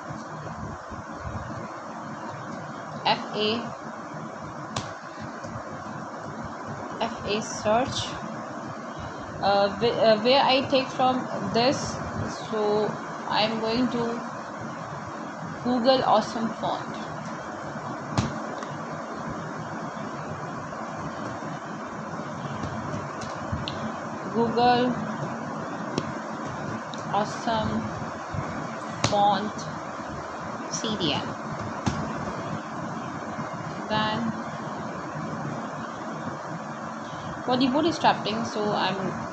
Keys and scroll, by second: 1.7 w, 2.6 Return, 5.2-7.7 typing, 9.7-11.9 typing, 12.9 Down, 13.5 space, 15.1-16.5 typing.